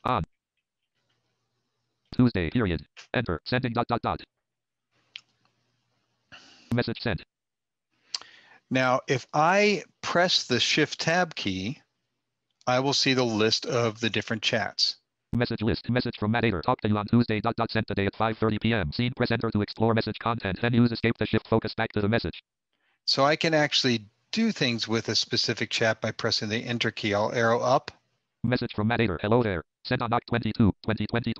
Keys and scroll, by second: 9.9 shift+Tab, 10.5 shift+Tab.